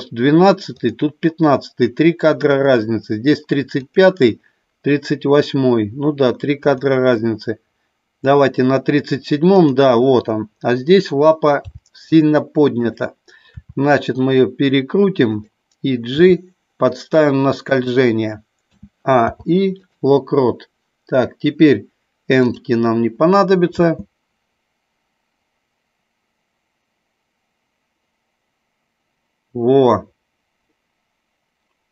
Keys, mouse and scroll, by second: 0.8 click, 2.4 click, 3.8 click, 6.6 click, 9.5 click, 11.5 g, 12.8 click, 13.5 r, 16.0 g, 17.8 click, 18.7 a, 19.1 i, 23.8 space.